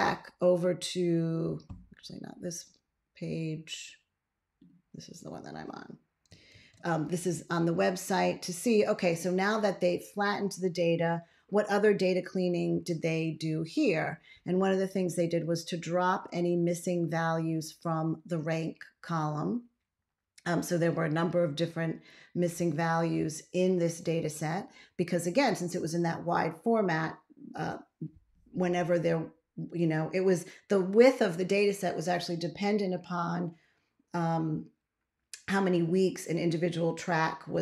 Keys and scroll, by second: 6.4 ctrl+x.